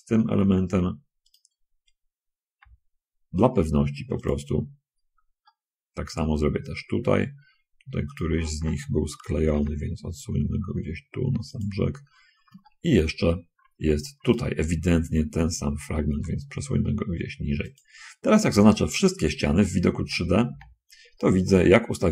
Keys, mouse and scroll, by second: 0.3 middle click, 1.6 click, 2.8 g, 4.5 click, 4.8 middle click, 5.7-7.3 drag, 7.3-7.8 scroll up 2, 8.4 click, 9.7 g, 11.9 click, 12.4 middle click, 12.9 shift+click, 13.9 shift+middle click, 14.6 click, 16.4 g, 18.0 click, 20.0 a, 20.7 a.